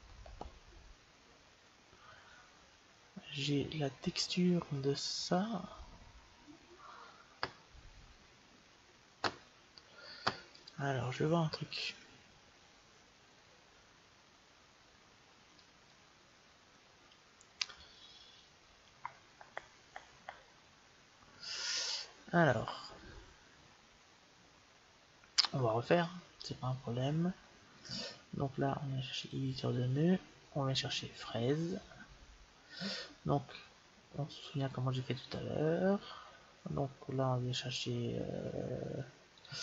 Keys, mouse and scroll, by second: 3.2-4.9 drag, 11.6-13.5 drag, 15.4-17.3 drag, 27.7-29.6 drag, 39.2-39.6 drag.